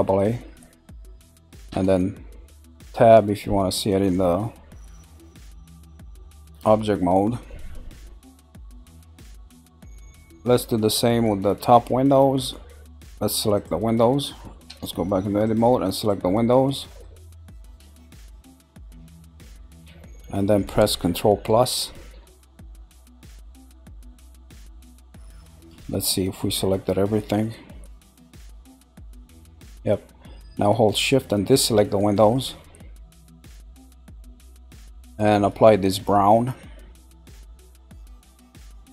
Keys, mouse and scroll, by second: 0.0 scroll down 2, 0.6-1.7 middle drag, 1.7 Tab, 2.3-2.8 scroll down 1, 3.2-4.3 middle drag, 4.3-4.9 scroll down 2, 4.9-6.7 middle drag, 6.7 scroll down 2, 7.4-8.8 middle drag, 8.8 scroll down 1, 8.9-9.6 scroll up 2, 9.6 scroll up 2, 10.1-13.5 shift+middle drag, 13.5 shift+click, 14.7 Tab, 15.4 shift+click, 16.0 shift+click, 16.5-18.6 middle drag, 18.6 shift+click, 19.0 shift+click, 19.4 scroll down 2, 20.0-22.5 middle drag, 27.4-29.8 shift+middle drag, 31.0 click, 31.5 shift+click, 32.2 shift+click, 32.7 middle click, 33.7 shift+click, 34.1 scroll down 2, 34.7-36.3 middle drag, 36.3 click, 37.6 click.